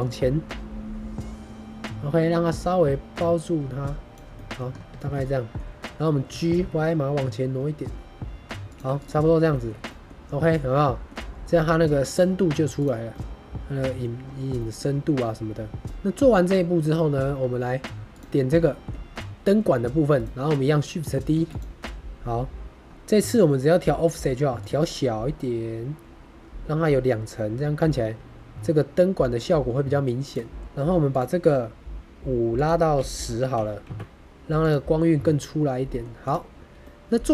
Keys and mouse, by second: 0.0-4.1 drag, 4.2 middle drag, 4.9 shift+middle click, 5.1 middle click, 6.2 g, 6.5 y, 8.6 shift+click, 9.4 shift+middle drag, 9.8 middle drag, 10.4-11.0 middle drag, 11.4-11.8 middle drag, 12.0 click, 12.7 click, 13.0-13.9 middle drag, 14.5 middle click, 15.8 middle drag, 16.8-17.1 middle drag, 18.6 shift+middle drag, 19.5 g, 20.1 click, 21.3 shift+d, 21.4 click, 24.5 click, 25.1 shift+middle click, 25.7-30.2 shift+drag, 31.0 click, 32.4-34.3 drag, 34.5 click, 35.2-35.9 middle drag, 36.7-37.3 middle drag.